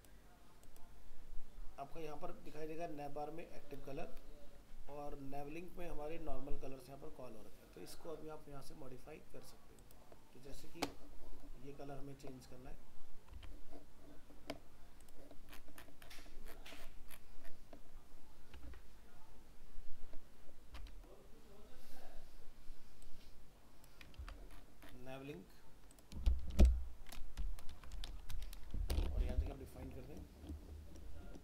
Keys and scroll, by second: 13.3 alt+Tab, 24.2 ctrl+c, 27.7 ctrl+v.